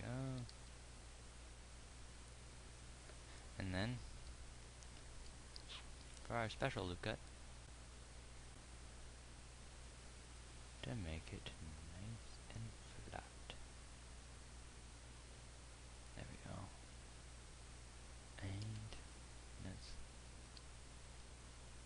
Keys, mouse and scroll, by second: 0.5 g, 4.5 ctrl+r, 19.3 Tab, 20.9 z.